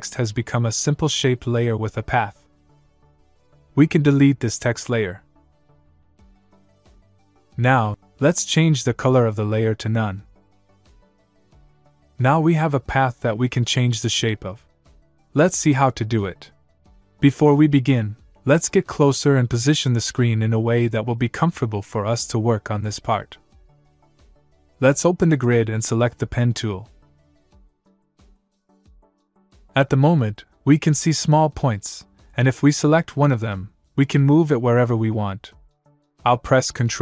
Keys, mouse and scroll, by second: 5.1 click, 8.7 click, 11.6 click, 18.4 scroll up 1, 20.9 middle click, 30.2 click, 33.7 click.